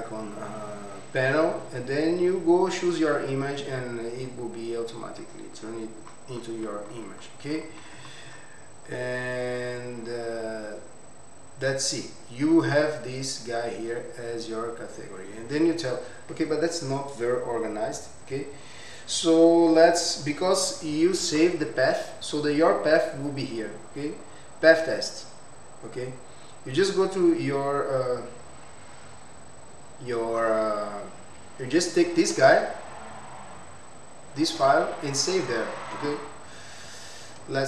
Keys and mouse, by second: 9.5-10.1 drag, 10.5-15.1 drag, 18.8 click, 23.0-24.5 drag, 26.4 click, 28.5-31.1 drag, 31.3 click, 33.5 click, 35.7-37.6 drag.